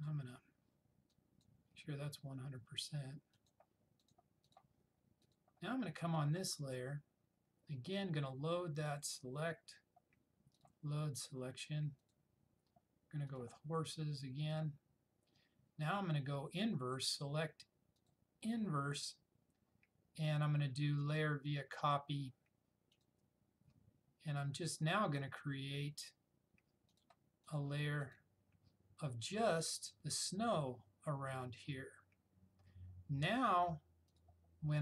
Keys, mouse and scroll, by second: 0.0 click, 0.1-1.9 drag, 9.0 click, 17.0 click, 21.0 click, 23.0 click, 27.0 click, 34.2-34.8 drag.